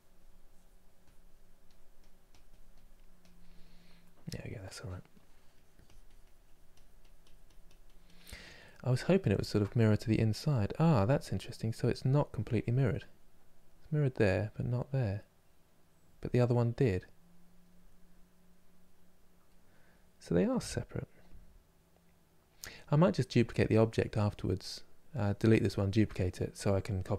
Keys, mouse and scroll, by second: 3.5-4.8 middle drag, 4.8-8.3 drag, 8.3-27.1 middle drag.